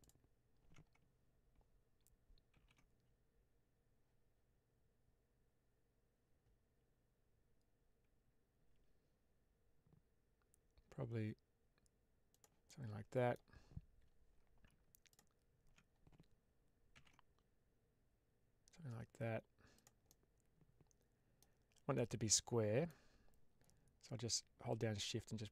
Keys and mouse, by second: 0.0 alt+click, 2.4 ctrl+b, 12.2 click, 12.5 middle click, 15.1 alt+click, 16.8 ctrl+b, 19.6 click, 19.9-21.3 middle drag, 21.8 middle click, 24.7-25.5 shift+drag.